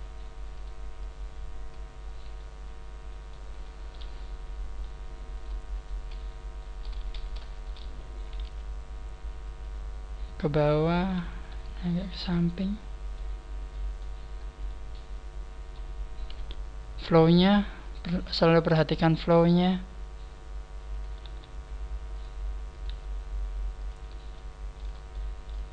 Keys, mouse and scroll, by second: 0.4 right click, 0.9 click, 2.0 scroll down 3, 2.5 middle click, 3.8 middle click, 5.3 right click, 5.7 shift+right click, 6.5 middle click, 7.0 ctrl+z, 7.5 shift+right click, 8.4 KP_1, 9.5 click, 10.8 right click, 11.5 g, 13.1 click, 13.1 middle click, 14.6 middle click, 16.3 KP_3, 17.1 scroll up 1, 17.8 right click, 18.0 g, 19.0 right click, 20.8 shift+right click, 21.2 g, 22.1 click, 22.6 shift+right click, 22.7 click, 22.7 g, 22.8 g, 23.8 click, 24.3 shift+middle click, 25.0 shift+middle click.